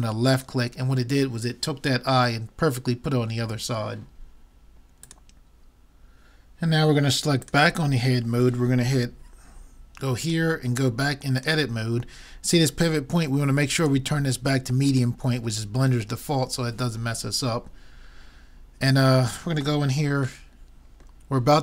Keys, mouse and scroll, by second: 7.4-9.2 drag, 11.4 click, 13.8-15.6 drag, 19.4-21.5 middle drag.